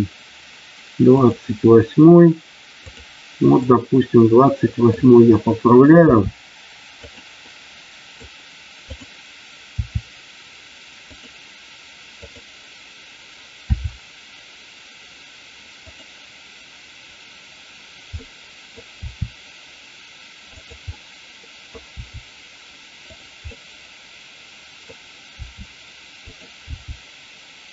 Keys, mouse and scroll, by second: 1.1 click, 2.7 click, 3.6-4.9 middle drag, 6.0 r, 7.0 click, 7.4 middle click, 9.7 r, 11.2 click, 13.7 r, 15.9 click, 18.3 middle click, 18.9 r, 20.9 middle click, 23.5-24.8 middle drag, 25.4 r, 26.6 g.